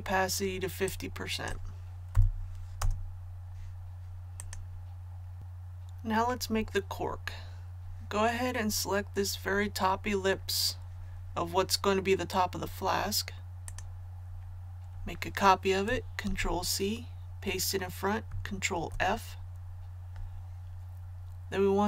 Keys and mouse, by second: 2.7 KP_5, 2.8 Tab, 4.4 click, 16.2 ctrl+c, 18.7 ctrl+f.